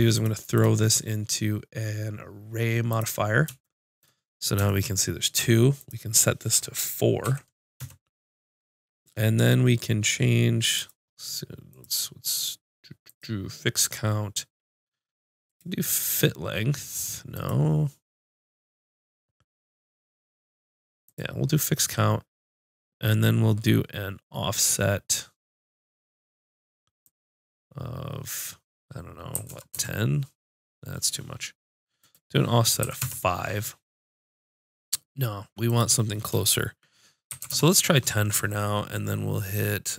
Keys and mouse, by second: 4.1 middle click, 5.7-7.6 drag, 5.7-7.6 middle drag, 10.7-28.7 drag, 31.9-33.7 drag, 35.6-39.9 middle drag.